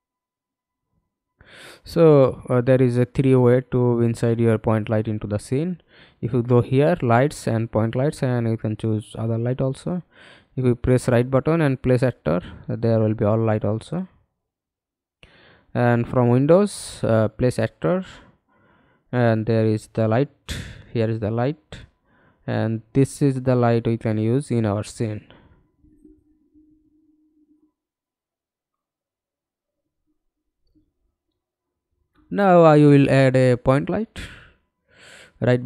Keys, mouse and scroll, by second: 7.2 middle click, 8.2 right click, 15.1 middle click, 15.3-15.9 scroll down 1, 28.3-28.6 scroll down 3, 28.6-29.7 scroll up 7, 29.7 middle click, 31.5 right click, 35.2 middle click.